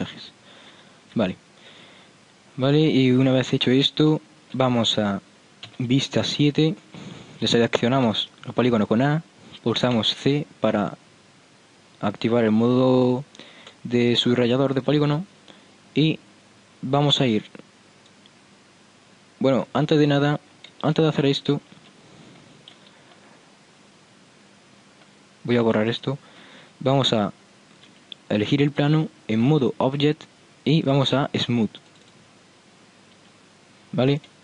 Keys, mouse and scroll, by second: 0.0 click, 0.2-1.2 right drag, 1.2 click, 1.2 n, 8.2 a, 10.0 c, 23.4 middle click, 25.8 c, 28.0 Tab, 32.8-33.2 drag, 33.4 Tab, 33.7 click.